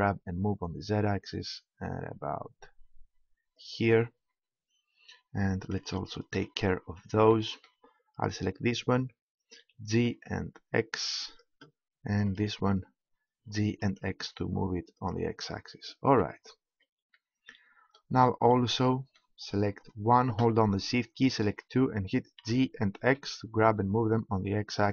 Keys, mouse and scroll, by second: 3.7-5.5 drag, 5.6-8.1 middle drag, 8.1 click, 8.8 right click, 9.6 g, 11.4-12.7 drag, 13.2 right click, 13.3 g, 15.1-17.1 drag, 20.5-22.8 right drag, 22.4 g.